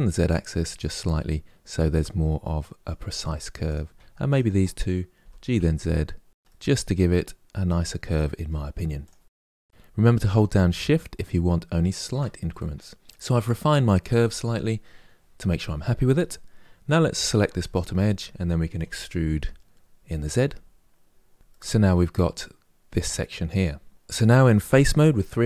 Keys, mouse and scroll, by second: 0.9-3.3 middle drag, 3.3 click, 4.0 shift+click, 4.9 g, 6.6-7.8 middle drag, 8.0 click, 8.6 g, 12.2-15.8 middle drag, 16.9 2, 17.4 alt+click, 18.5 e, 21.3-23.9 middle drag, 24.4 3.